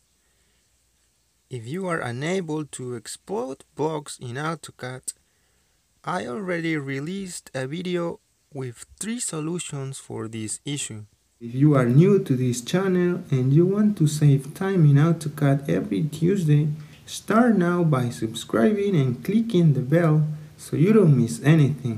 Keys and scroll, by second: 4.2 Escape.